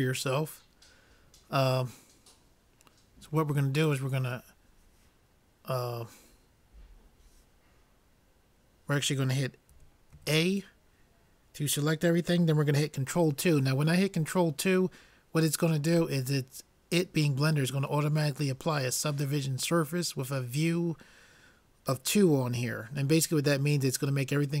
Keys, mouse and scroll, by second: 3.9-9.8 drag, 9.8 a, 10.2 a.